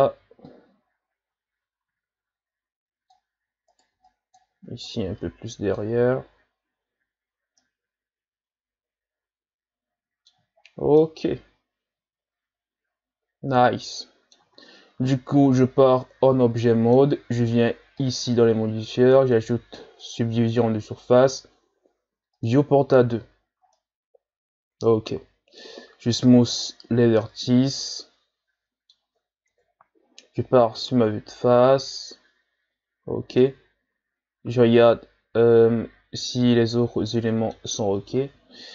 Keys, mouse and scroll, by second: 0.4-3.5 drag, 3.7 right click, 3.9 b, 4.8-6.2 drag, 6.2 z, 7.2-7.6 scroll down 1, 7.6-10.5 middle drag, 10.5-11.0 shift+scroll down 7, 11.0-14.1 middle drag, 14.5 Tab, 15.1 scroll down 3, 15.5-18.0 middle drag, 20.1 click, 22.3-23.4 drag, 23.4-23.8 shift+scroll down 4, 23.8-26.1 middle drag, 26.1 w, 27.2-29.5 middle drag, 29.5 KP_1, 30.6-31.3 scroll up 4, 31.5-32.6 shift+scroll up 2, 33.4-36.4 middle drag, 37.9 Tab.